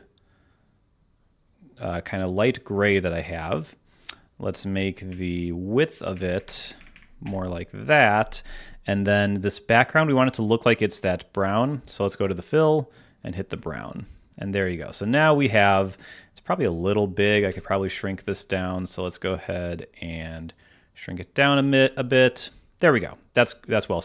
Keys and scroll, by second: 5.0 Up, 6.0 Up, 17.4 Escape.